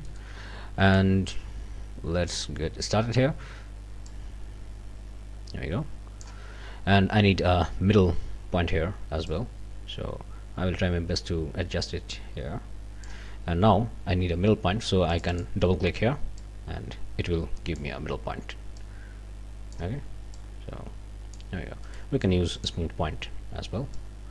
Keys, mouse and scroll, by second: 0.2 middle click, 0.9-2.5 drag, 4.1-6.4 drag, 9.3-13.3 drag, 15.1 click, 16.4-18.0 drag, 18.8-19.9 drag, 20.3-21.5 drag, 21.9 right click, 22.5 click, 23.9-24.3 drag.